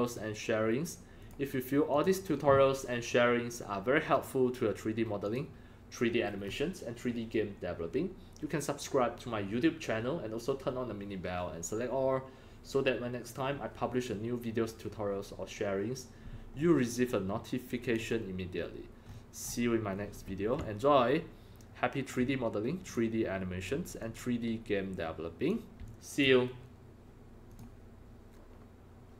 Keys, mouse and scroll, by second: 1.1 click, 1.9 click, 4.1 click, 5.2 click, 16.5-17.0 scroll up 8, 17.8 click, 19.0-19.9 scroll up 13, 20.1-20.5 scroll down 3, 20.5-22.0 alt+drag, 21.7-22.0 scroll, 22.8 click, 24.0-25.4 drag, 25.8 alt+click, 27.4 click.